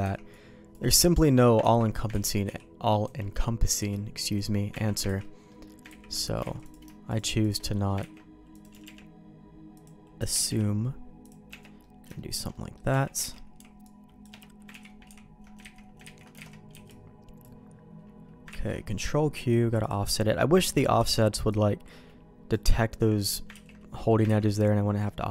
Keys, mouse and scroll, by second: 0.0 c, 1.6 ctrl+q, 2.1 ctrl+x, 2.4 b, 3.8 b, 4.8 ctrl+q, 5.1 ctrl+x, 5.2 middle click, 5.6 middle click, 6.1 ctrl+z, 6.5 alt+a, 6.6 click, 7.1 shift+click, 7.7 middle click, 8.1 ctrl+x, 8.5 click, 8.7 g, 10.2 click, 10.3 g, 11.5 Tab, 11.8 middle click, 12.1 shift+middle click, 12.5 middle click, 12.9 Tab, 13.2 alt+a, 13.5 c, 14.7 ctrl+q, 15.1 ctrl+x, 15.8 ctrl+z, 16.0 ctrl+z, 16.4 alt+a, 16.7 b, 18.7 ctrl+q, 20.6 ctrl+x, 21.0 b, 23.6 ctrl+q, 24.2 ctrl+x, 25.0 middle click.